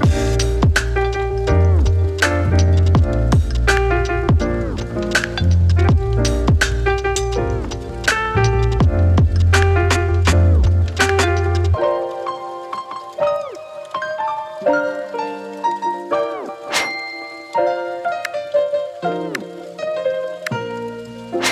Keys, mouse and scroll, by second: 4.0 ctrl+space, 4.4-5.8 typing, 5.7 click, 11.8 click, 13.4 space.